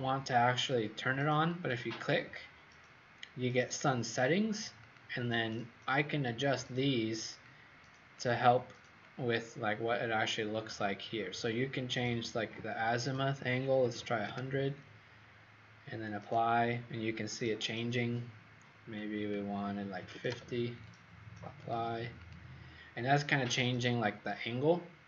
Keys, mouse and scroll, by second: 13.8 KP_1, 13.9 KP_0, 14.1 KP_0, 14.2 KP_Enter, 16.1 click, 19.9 KP_5, 20.0 KP_0, 20.2 KP_Enter, 21.5 click, 22.2 click.